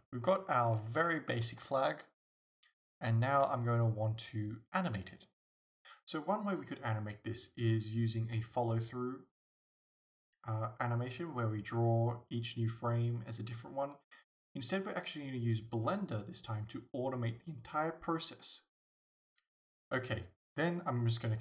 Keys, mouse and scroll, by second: 1.1-1.7 scroll up 2, 9.0-19.5 drag, 19.5-21.4 shift+middle drag.